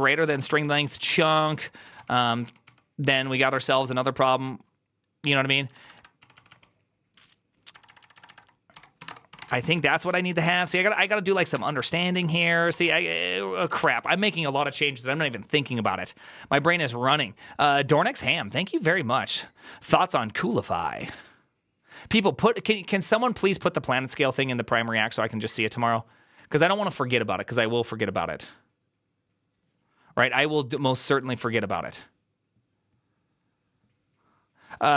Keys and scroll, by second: 0.0-14.3 typing, 3.2 ctrl+c, 3.3 ctrl+c.